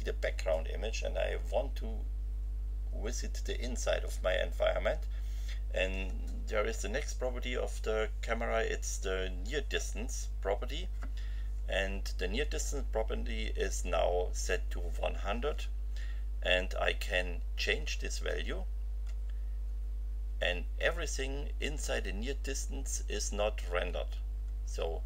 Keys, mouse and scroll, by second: 17.7 F5, 19.0 F5, 21.2 F5, 23.8 F5.